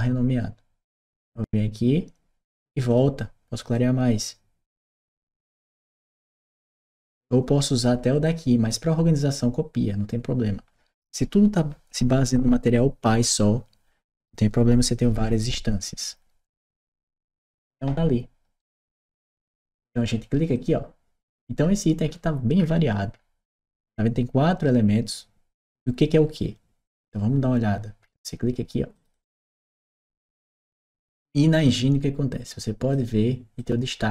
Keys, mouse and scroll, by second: 0.8 click, 1.0 click, 2.7 click, 3.5-4.9 drag, 5.7 click, 8.0 click, 17.3 click, 18.4 right click, 19.4 right click, 19.9 middle click, 20.4 click, 27.8 middle click, 28.9 click, 33.5-34.1 drag.